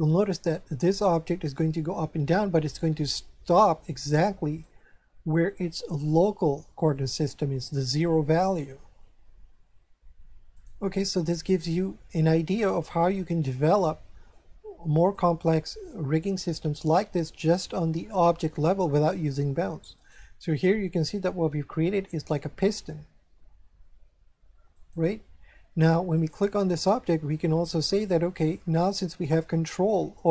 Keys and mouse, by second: 4.5 right click, 6.9 click, 8.4 right click, 8.9 r, 10.5 right click, 11.6 right click, 15.0 click, 19.9 right click, 20.8 r, 24.7 right click, 26.1 right click.